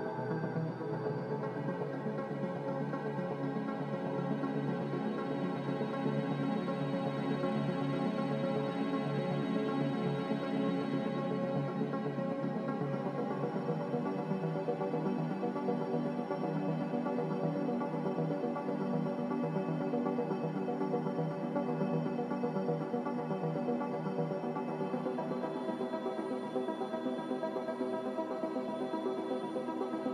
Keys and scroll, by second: 8.6 ctrl+z, 11.9 ctrl+z, 27.8-29.2 typing.